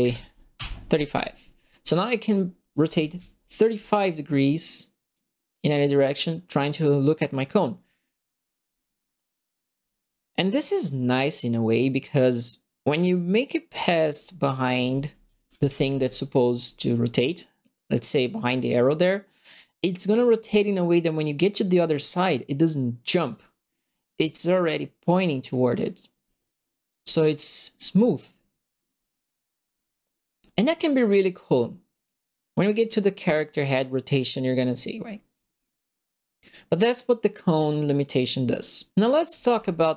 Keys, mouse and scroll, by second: 0.0 KP_3, 0.5 KP_Enter, 1.9 click, 2.5-3.6 typing, 2.7-3.8 right drag, 5.1-8.8 drag, 8.8 right click, 9.4-14.2 drag, 14.5-15.8 typing, 14.5-16.1 right drag, 18.1-21.1 drag, 21.1-23.3 right drag, 23.3-29.4 drag, 29.4-33.4 right drag, 33.4-37.5 drag, 38.9-39.9 right drag, 39.0-39.9 typing.